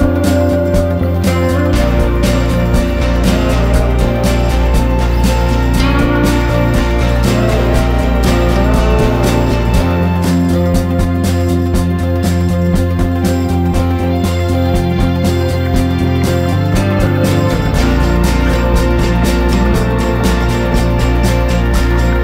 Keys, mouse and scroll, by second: 4.8 F4, 5.2 click, 7.3 F4, 8.4 click, 10.3 F4, 10.8 click, 13.0 F4, 13.7 click, 15.9 F4, 16.3 click, 18.0 ctrl+g, 19.3 click, 19.5 shift+9, 21.5 Down, 21.8 typing.